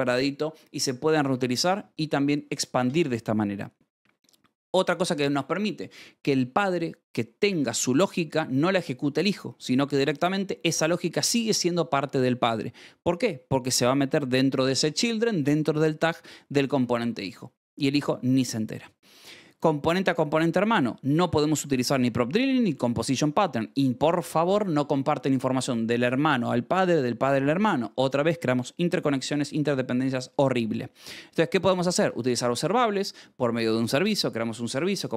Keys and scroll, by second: 2.3 Escape, 15.2 Escape, 19.3 j, 19.9 shift+v, 20.6 Escape, 20.9-23.3 typing, 23.3 Escape, 31.5-32.4 typing, 32.8 Escape.